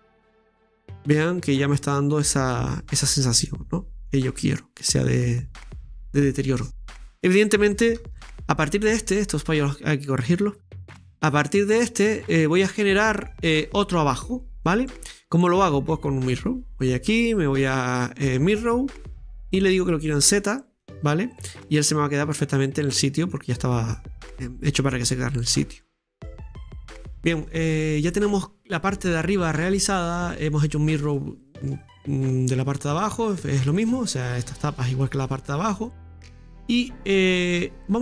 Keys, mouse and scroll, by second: 0.0 click, 0.7-1.0 scroll up 2, 1.0-4.0 middle drag, 4.9 scroll down 1, 5.3-8.0 middle drag, 6.7-8.0 scroll up 1, 8.0 Tab, 8.1 middle click, 8.2-8.9 scroll down 1, 8.9 right click, 10.6 scroll down 2, 10.8-18.5 middle drag, 18.5 click, 19.1-20.3 middle drag, 20.3-21.4 drag, 21.4-23.6 middle drag, 23.6 right click, 23.9-26.6 middle drag, 26.6 scroll up 3, 26.9 middle click, 27.5-28.0 scroll down 2, 28.0 scroll down 3, 28.1-32.6 middle drag, 33.0 scroll down 4, 33.1-36.1 middle drag, 36.4-38.0 middle drag.